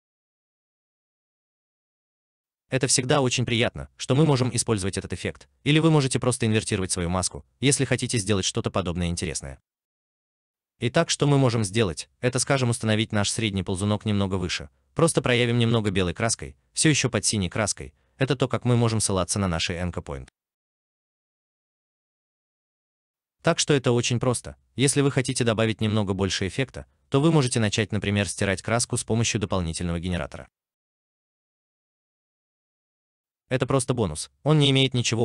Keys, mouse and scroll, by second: 14.4 alt+right click, 15.2 alt+click, 18.7 alt+right click, 19.5 alt+click, 20.0 alt+middle click.